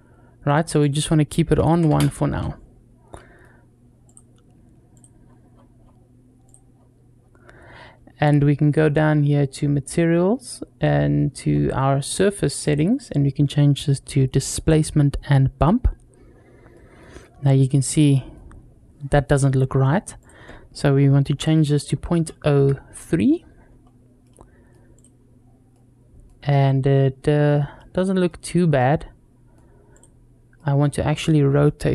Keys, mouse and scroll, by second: 0.6-2.2 drag, 3.0 middle click, 3.9 click, 4.7 click, 5.0-6.3 scroll down 3, 6.3 click, 6.5-8.0 scroll down 2, 12.4-14.5 drag, 16.1-16.5 scroll down 2, 16.5-16.9 middle drag, 17.9 middle click, 20.0-23.1 drag, 23.6 scroll up 1, 24.1-24.6 middle drag, 25.0 click, 25.5-26.1 middle drag, 26.7-27.3 scroll up 2, 27.3-27.6 scroll down 2, 27.6-28.1 middle drag, 28.6-29.4 middle drag, 29.7 click, 30.4 middle drag, 30.8 scroll down 1.